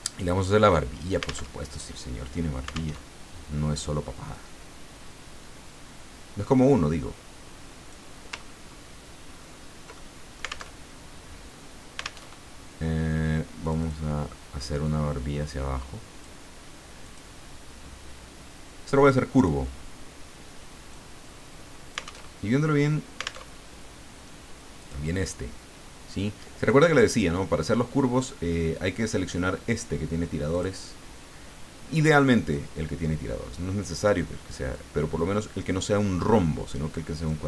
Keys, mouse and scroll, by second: 1.5 alt+Tab, 2.9 alt+Tab, 4.3-8.1 drag, 8.4-8.9 ctrl+scroll up 4, 9.6 ctrl+scroll up 1, 9.9 ctrl+middle click, 10.6 alt+Tab, 12.2 alt+Tab, 13.6 click, 14.8-16.5 drag, 17.0 click, 19.3 click, 20.9-22.3 drag, 22.3 alt+Tab, 23.4 alt+Tab, 24.8 click, 30.5 click, 32.5-34.3 drag, 34.7-37.4 drag.